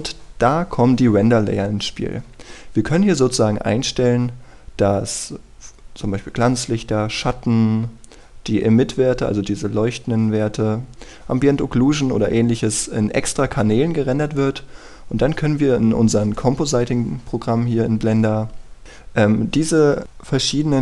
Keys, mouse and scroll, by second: 2.9-4.2 scroll down 1, 4.2-20.8 scroll up 1.